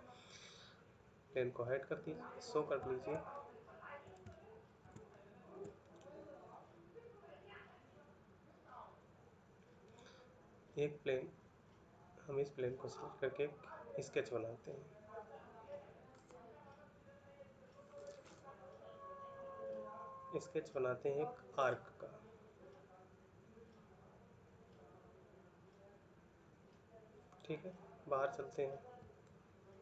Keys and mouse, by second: 3.1 shift+middle click, 4.8 shift+middle click, 29.0 ctrl+middle click.